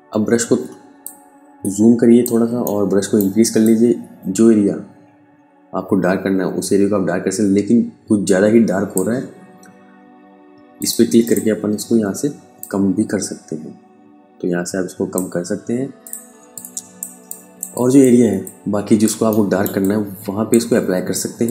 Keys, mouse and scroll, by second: 0.4 ctrl+Num_Lock, 0.4 ctrl+click, 0.8 ctrl+space, 2.1 alt+right click, 3.0 click, 15.7 space, 16.0 click, 16.4 space, 16.7 click, 16.8 space, 17.2 ctrl+alt+click, 17.9 ctrl+alt+click, 18.7 alt+right click, 19.2 click, 20.0 click.